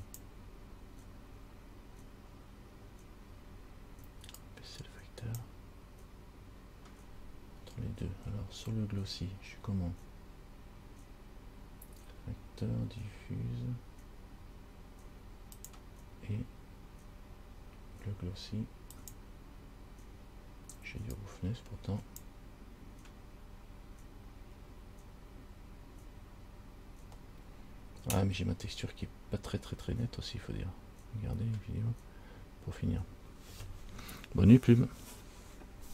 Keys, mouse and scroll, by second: 3.2 scroll down 1, 4.8 click, 15.9 click, 19.0 click, 19.2 click, 21.6 click.